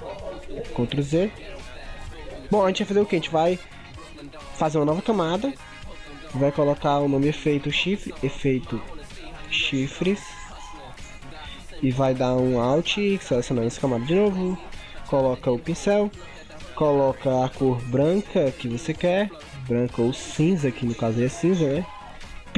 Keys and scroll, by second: 0.0 ctrl+x, 0.7 ctrl+z.